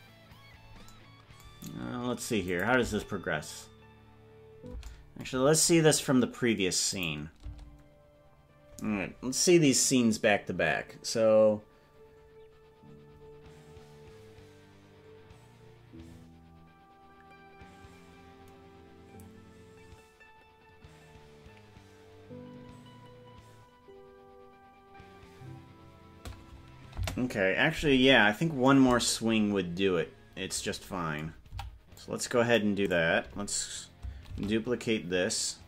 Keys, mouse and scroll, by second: 1.8 scroll up 1, 2.0 scroll down 5, 2.6 click, 2.8 space, 5.0 space, 5.4-6.4 scroll down 13, 7.0 click, 7.6 space, 27.2 space, 29.6-30.0 scroll up 5, 30.4-30.8 scroll up 5, 31.6 c, 34.4 shift+d.